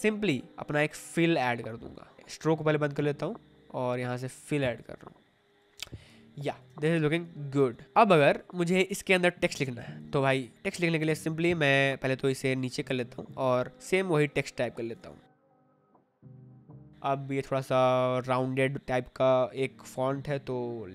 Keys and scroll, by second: 5.7 v, 6.6 space, 13.8 t, 15.0-17.5 typing.